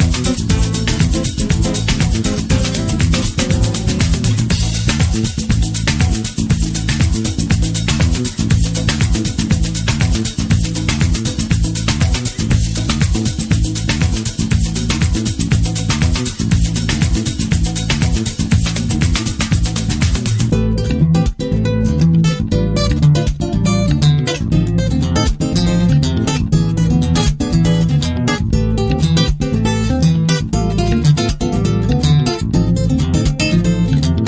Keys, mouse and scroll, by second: 12.9-15.7 drag, 15.2 scroll down 1, 15.7-31.2 middle drag, 18.2 shift+a, 29.5-31.2 scroll up 2, 31.2 click, 34.2 click.